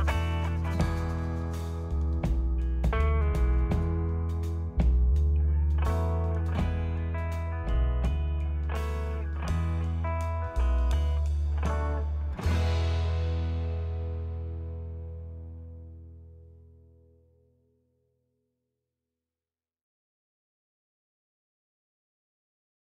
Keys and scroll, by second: 0.6 ctrl+v.